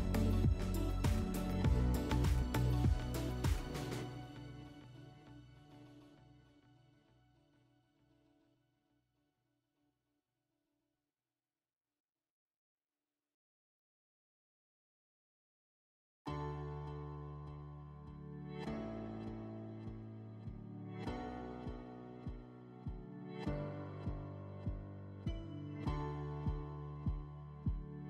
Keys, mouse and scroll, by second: 0.2-3.6 drag, 11.7-14.8 drag, 16.5 scroll, 18.0 middle click, 18.4-19.2 drag, 20.1 scroll, 23.1 click, 25.0 click, 25.8 click, 26.1 scroll, 27.1 click.